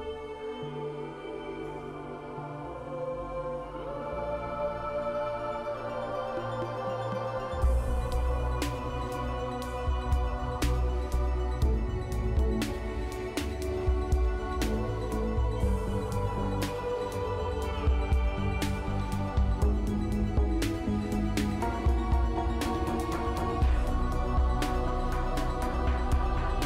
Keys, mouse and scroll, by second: 13.0 middle click, 13.5 middle click, 13.9 right click, 19.2 scroll up 2, 20.0 scroll up 2, 20.0 F2, 21.0 g, 21.6 s, 22.2 s, 22.2 Return, 24.3 a, 26.0 double click.